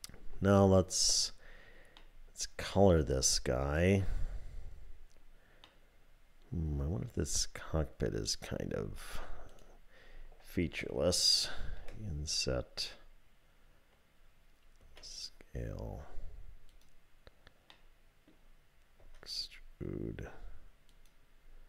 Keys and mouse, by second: 2.1-3.9 middle drag, 5.9-8.4 middle drag, 9.5 click, 11.8 i, 14.8 s, 17.7 click, 19.0 e.